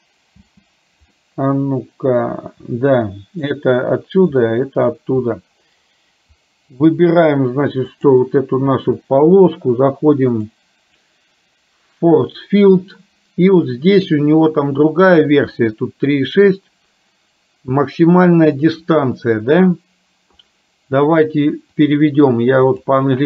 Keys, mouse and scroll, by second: 0.4 space, 1.2-3.6 middle drag, 4.6 middle click, 7.9 click, 10.4 click, 21.8-23.1 drag.